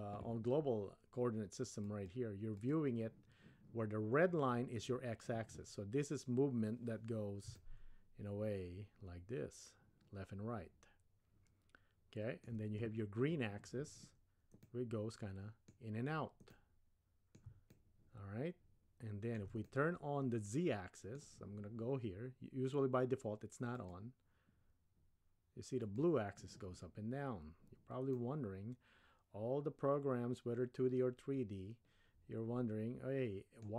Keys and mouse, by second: 1.9 click, 7.6-12.6 shift+middle drag, 14.6-15.7 middle drag, 16.5-17.4 middle drag, 17.7-19.4 shift+middle drag, 19.7-21.2 middle drag, 23.9-26.4 drag, 28.1-33.7 middle drag.